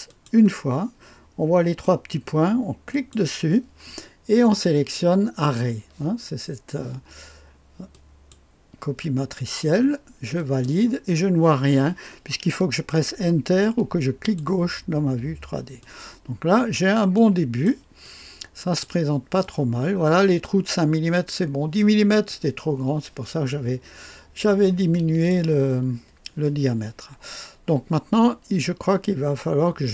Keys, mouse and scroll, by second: 0.0 click, 2.9 click, 7.9-8.9 drag, 10.3 click, 14.2 click, 16.7 click, 17.6 right click, 18.0-21.1 drag, 24.9-25.9 drag, 29.3-29.9 drag.